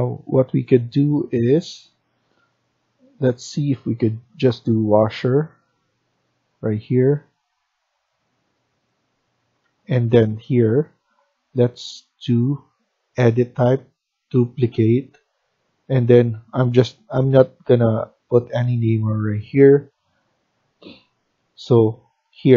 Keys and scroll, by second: 3.9-5.9 typing, 9.2 Escape, 9.5 Escape.